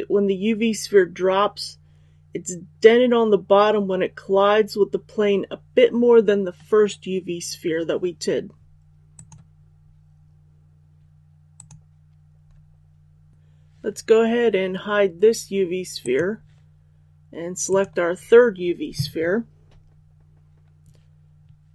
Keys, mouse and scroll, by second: 17.6 right click.